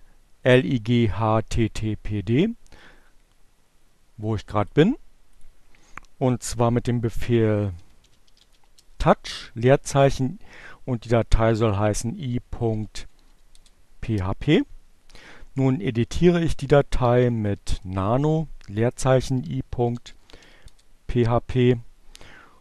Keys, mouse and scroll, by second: 1.6-6.1 drag, 5.8-7.0 typing, 8.2 h, 8.6 space, 11.4-12.5 typing, 13.1 Return, 16.1-17.3 typing, 18.7-20.0 typing, 20.3 Return, 21.7 <.